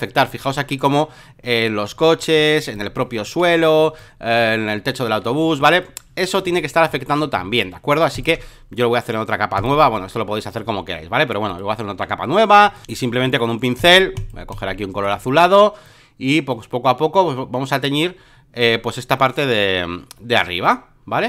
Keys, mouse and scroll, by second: 0.0 alt+middle click, 0.2 alt+middle click, 0.5 alt+middle click, 1.9 space, 2.0 click, 2.4 click, 2.8 click, 3.6 click, 4.0 click, 5.2 click, 5.6 click, 8.1 ctrl+click, 9.6-10.6 drag, 10.7 alt+middle click, 11.5 click, 12.6 alt+click, 13.8 alt+click, 14.1 alt+click, 14.5 alt+click, 15.8-21.2 drag.